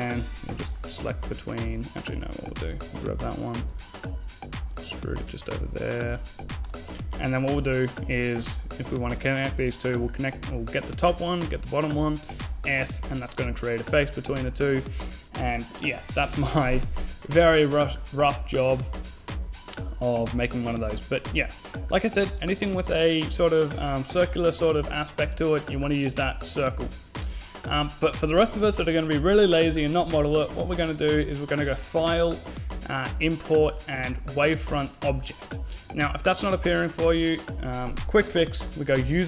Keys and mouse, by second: 2.7 e, 2.8 click, 10.5-11.8 right drag, 11.2 f, 11.4 a, 11.8 Tab, 12.8 Tab, 14.6 Tab, 21.0 x, 22.7 middle click, 24.9-25.9 middle drag, 30.5-32.3 drag.